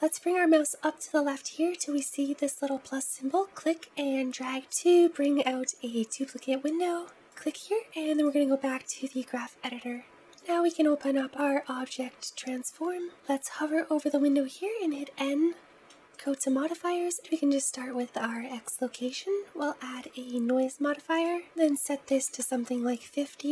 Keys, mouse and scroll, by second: 3.3 click, 10.2 click, 17.1-23.5 drag.